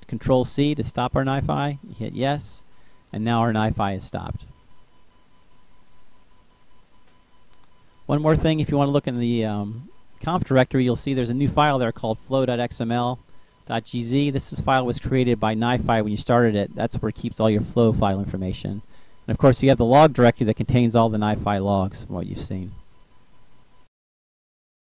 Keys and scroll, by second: 1.3 y, 1.7 Return.